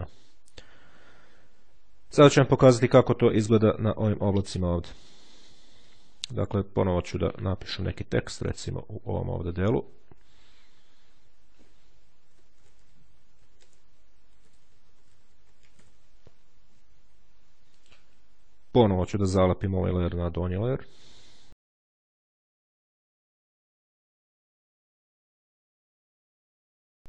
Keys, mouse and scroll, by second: 7.1 click, 9.6 click, 11.8-16.2 typing, 17.6 click, 18.7 right click, 20.0 click, 23.3 click, 25.0-27.0 drag.